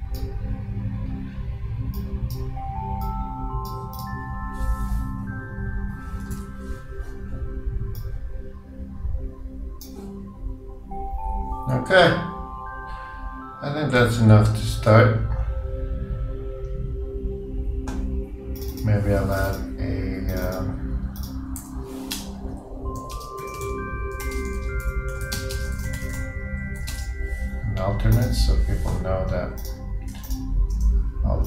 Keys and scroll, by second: 6.5 super+i.